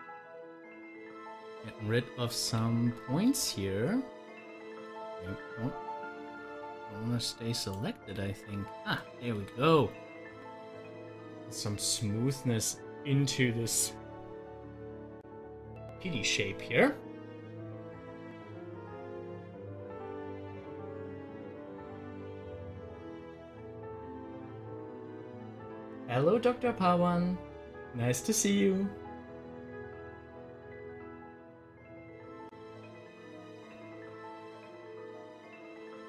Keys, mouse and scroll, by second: 0.7 click, 0.9 Delete, 1.6 click, 2.4 Delete, 2.9 click, 3.3 Delete, 3.7 click, 7.5 click, 8.0 Delete, 8.9 click, 9.3 Delete, 11.9 Delete, 11.9 click, 14.1 scroll down 1, 14.8-18.0 middle drag, 21.4 scroll up 1, 25.1 scroll down 1, 26.8 scroll down 1, 33.1 scroll down 1, 33.2-36.0 drag.